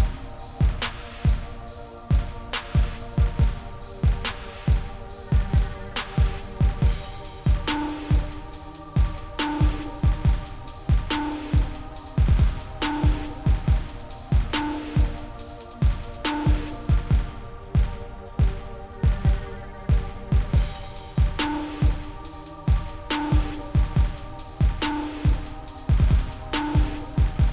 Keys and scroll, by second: 1.1 0, 8.2 0, 13.4 0, 19.7 0, 21.3 r, 23.1-24.8 typing, 26.5 0.